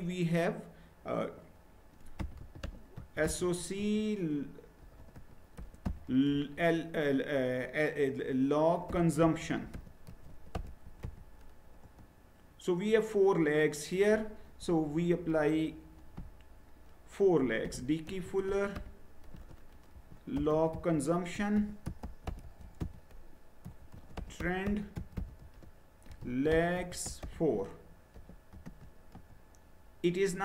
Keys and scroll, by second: 1.9-6.8 typing, 8.7-11.5 typing, 11.8 Return, 17.1-28.6 typing, 29.1 Return.